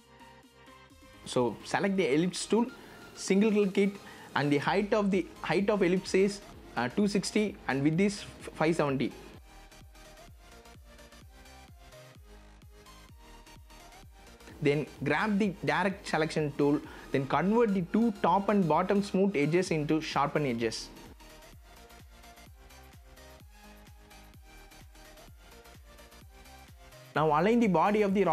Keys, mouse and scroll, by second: 2.1 BackSpace, 3.9 KP_2, 4.1 KP_6, 4.3 KP_0, 5.9 click, 7.0 BackSpace, 8.2 KP_5, 8.6 KP_7, 8.9 KP_0, 10.6 click, 11.9-12.9 scroll down 1, 12.9 click, 14.2-14.5 scroll down 1, 14.8-24.1 drag, 24.1 v, 24.6 click, 25.1 z, 25.5 click, 26.5 v, 26.8-28.3 drag.